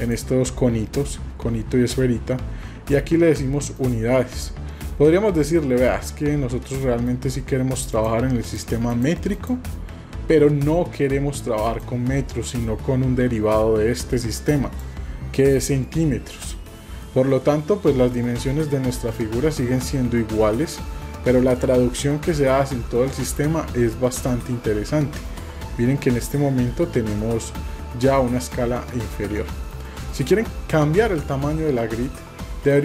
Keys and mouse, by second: 0.0 click, 3.7 click, 6.7 middle click, 8.0 click, 8.9 click, 11.7-14.7 drag, 15.9-16.7 middle drag, 17.0 shift+middle click, 20.5 middle click, 23.4 middle click, 29.3 middle click, 32.7 click.